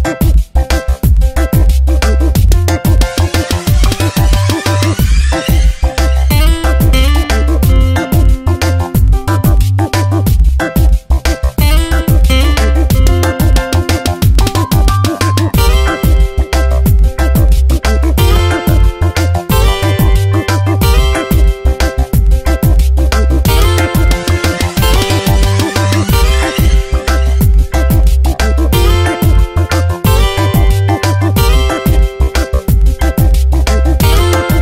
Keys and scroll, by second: 1.0 F9, 1.5 space, 3.1 space, 4.5 space, 6.0 space, 8.3 space, 9.9 space, 13.4 space, 22.9 ctrl+z, 24.6 ctrl+z, 25.8 space, 29.2 space, 32.2 space, 34.4 space.